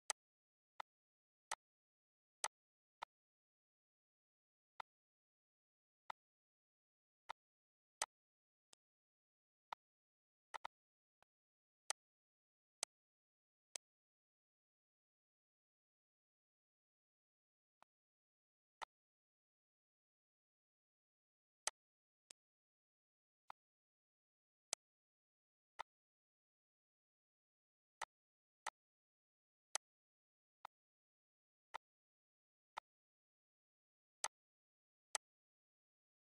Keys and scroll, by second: 34.0 ctrl+s.